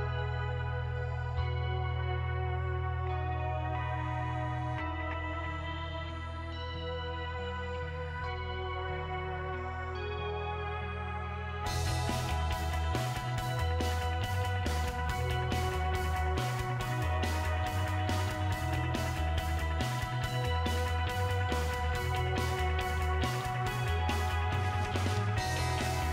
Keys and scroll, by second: 19.2 Delete, 25.0 Delete.